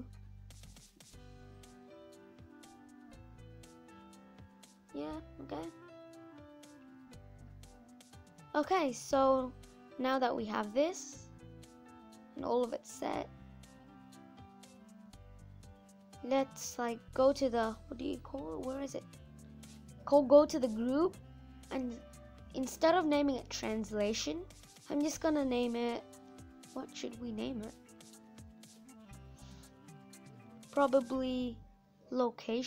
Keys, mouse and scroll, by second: 0.2 n.